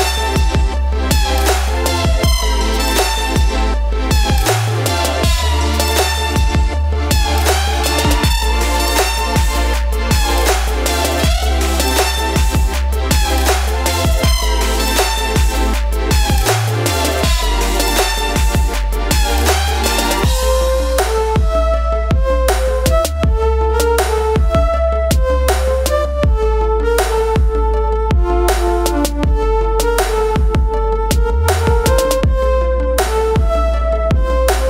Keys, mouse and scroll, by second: 0.0-0.8 typing, 0.6 click, 5.6 click, 6.6 4, 8.2 click, 10.7-11.1 typing, 12.9-14.2 drag, 14.2 typing, 16.0 click, 18.6-34.6 drag.